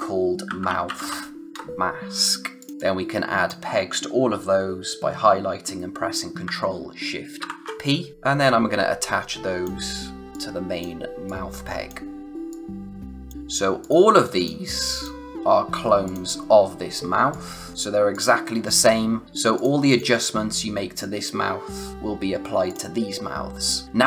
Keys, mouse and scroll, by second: 0.2-1.5 typing, 2.6 click, 7.3 ctrl+shift+p, 8.1 click, 13.3 space, 13.8 click, 22.6 click.